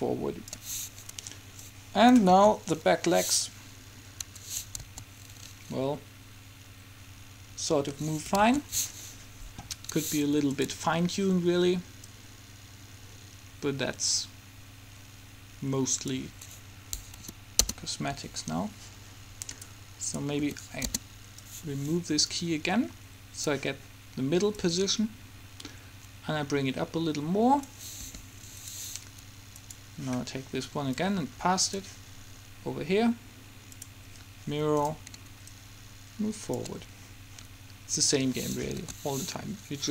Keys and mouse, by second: 2.5 alt+a, 4.4 Escape, 5.0 alt+a, 8.2 Escape, 8.4 alt+a, 10.0 Escape, 12.3 middle click, 17.5 Delete, 17.7 Return, 20.5 Delete, 21.9-23.4 drag, 24.7-26.5 drag, 26.5 middle click, 28.2 r, 29.7-32.9 drag, 33.9-34.9 drag, 34.9-36.6 middle drag, 36.9 click, 38.1 click, 38.9 alt+a.